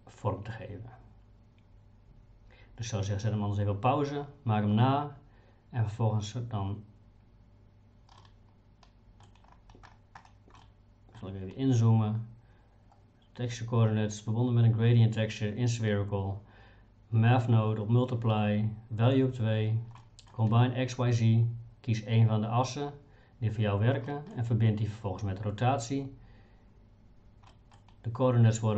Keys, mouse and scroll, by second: 8.2-9.3 middle drag, 10.6 middle click, 20.0 middle click, 24.1 middle click, 27.5 middle click.